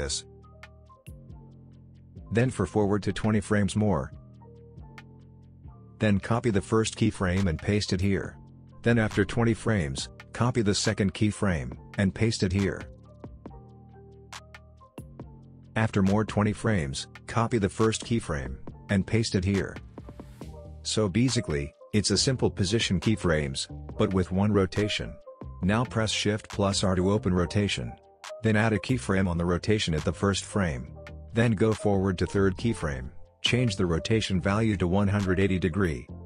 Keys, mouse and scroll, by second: 4.5-5.4 shift+drag, 8.0 ctrl+c, 8.6 ctrl+v, 10.1-10.7 shift+click, 13.0 ctrl+c, 14.0 ctrl+v, 15.8-18.7 drag, 19.4 ctrl+c, 20.1 ctrl+v, 20.8 click, 20.8-21.4 click, 21.3 space, 23.6 space, 24.3-24.9 click, 26.2 shift+r, 27.5-30.9 drag, 29.3 click, 30.9-32.5 drag, 34.2 Return, 35.7-36.2 drag.